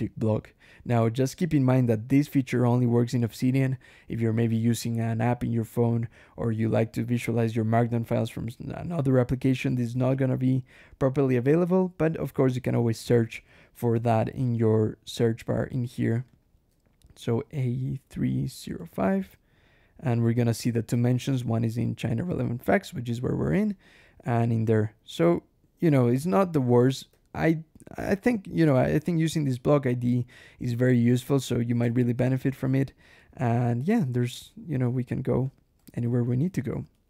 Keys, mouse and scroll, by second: 0.6 click, 13.9 ctrl+shift+h, 15.0 click, 16.2 click, 16.9-19.2 typing, 23.6 click, 25.7 click, 26.2 BackSpace, 27.4 ctrl+shift+h, 27.9 click, 28.7 click, 31.8 ctrl+shift+l, 33.0 click, 34.1 click, 35.3 click, 35.6 Escape, 36.1 j, 36.8 o, 37.0 Escape.